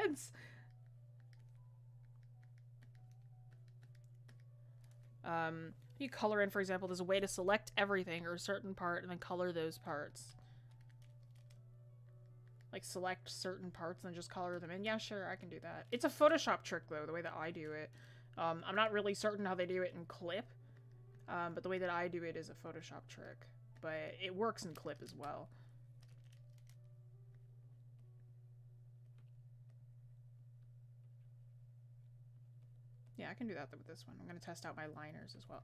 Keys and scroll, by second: 5.5 ctrl+z.